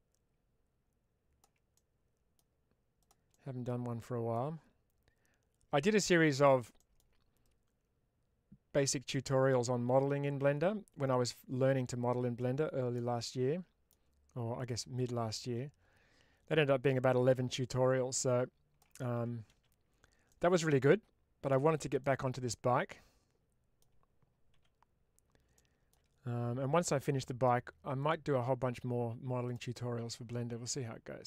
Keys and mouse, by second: 1.6 middle click, 2.9 click, 3.2-4.2 middle drag, 6.8 middle click, 7.3-8.7 drag, 9.0 middle click, 9.8 ctrl+z, 11.1-12.9 drag, 13.1 middle click, 14.4 click, 15.3-18.7 drag, 19.0 z, 20.2-21.4 middle drag, 21.9-23.7 middle drag, 25.4 middle click, 26.9 middle click, 27.9 click, 29.3 click.